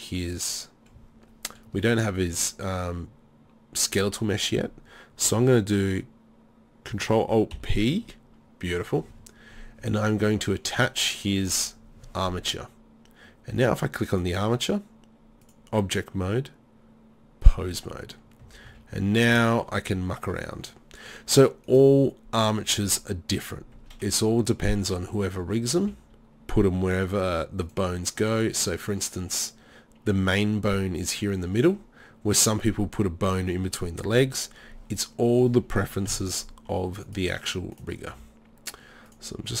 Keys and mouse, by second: 1.9 drag, 7.6 ctrl+alt+p, 18.5 a, 18.7 a, 21.7 right click, 23.8 KP_3, 25.8 g, 27.8-28.7 drag, 36.1 KP_3, 38.2 r.